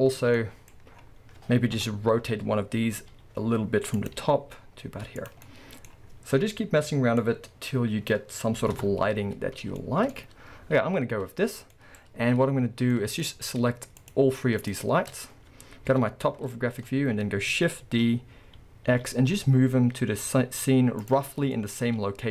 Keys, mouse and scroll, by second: 0.0-1.8 scroll down 4, 1.8 KP_7, 2.4-3.1 middle drag, 2.4-3.1 scroll down 2, 3.1 r, 4.2 g, 5.5-7.2 middle drag, 5.9-6.6 scroll, 7.2-9.8 drag, 9.4-9.8 scroll, 9.8-14.0 shift+middle drag, 11.3-11.7 scroll, 14.0 shift+click, 14.6 shift+click, 15.9 KP_7, 16.7-17.3 scroll down 1, 17.9 shift+d, 21.6-22.3 middle drag.